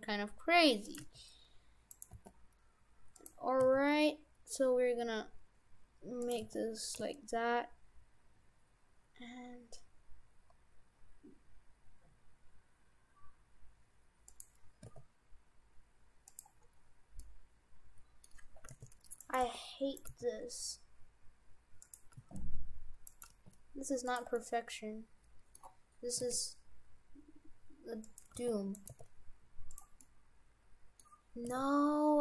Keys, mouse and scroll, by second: 1.0 g, 2.2 g, 3.6 s, 6.4 g, 7.0 g, 14.8 s, 16.6-17.2 scroll up 6, 17.2 middle click, 18.7 g, 19.4 g, 20.1 g, 22.2 g, 23.3 g, 24.4 middle click, 26.2 s, 28.4 g, 28.9 g, 30.0 middle click, 31.5 s.